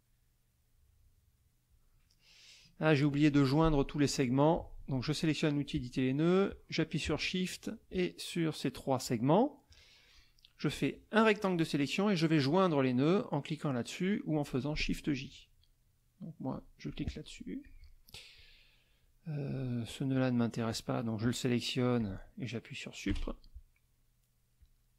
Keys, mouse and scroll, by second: 5.0 click, 7.6 shift+click, 9.0 shift+click, 10.7-11.7 drag, 16.5 click, 17.6 click, 18.3 click, 19.5 click, 20.1 click, 22.0 click, 23.1 Delete, 24.6 click.